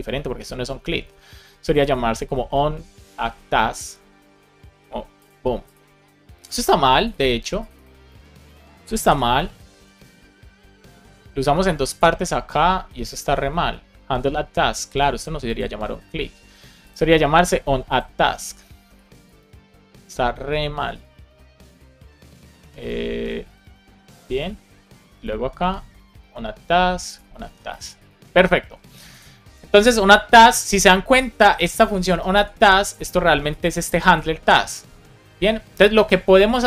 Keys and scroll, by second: 8.0 super+c, 8.9 shift+super+f, 9.3 shift+', 9.7 super+v, 18.6 BackSpace, 21.1 super+c, 23.8 super+v, 24.4 super+s, 26.3 super+v, 27.4 super+v, 27.8 super+s, 32.2 super+c.